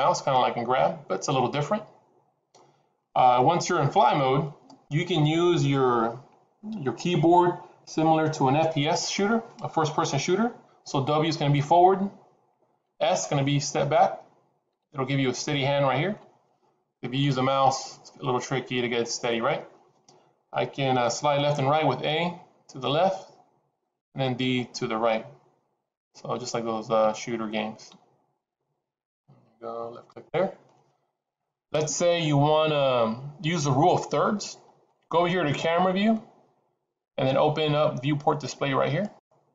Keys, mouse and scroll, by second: 39.0 click.